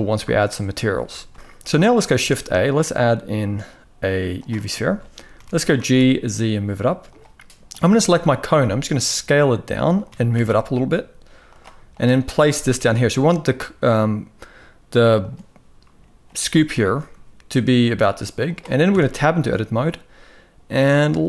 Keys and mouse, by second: 0.7 shift+middle click, 1.3 ctrl+s, 1.8 shift+a, 4.5 shift+middle drag, 7.7 shift+middle click, 8.1 s, 9.7 g, 11.6 click, 12.2 g, 16.5 shift+middle click, 18.6 Tab.